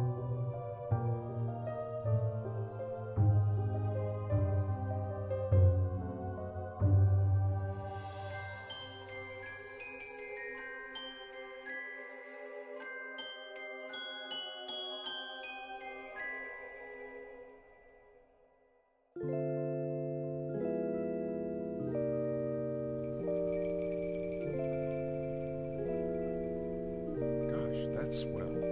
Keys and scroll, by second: 26.3 ctrl+s, 26.3-28.0 typing.